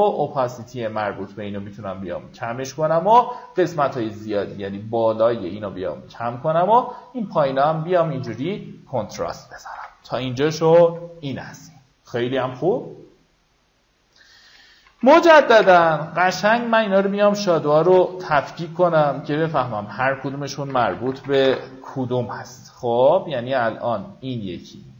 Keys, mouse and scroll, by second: 8.0-8.4 alt+scroll down 1, 9.9 alt+scroll up 1, 13.5 click, 14.2-15.6 typing, 19.4 click, 20.3-21.4 typing, 22.1 click.